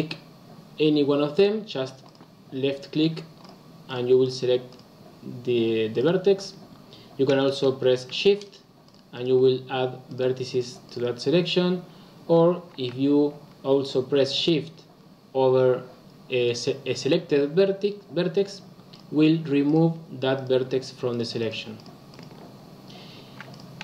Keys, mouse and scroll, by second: 2.0 click, 3.4 click, 3.8 click, 4.1 click, 4.6 click, 5.8 click, 6.3 click, 8.3 shift+click, 8.8 shift+click, 9.1 shift+click, 10.0 shift+click, 10.4 shift+click, 10.8 shift+click, 18.8 shift+click, 19.6 shift+click, 20.3 shift+click, 21.0 shift+click, 21.3 shift+click, 21.7 shift+click, 22.0 shift+click, 23.4 click.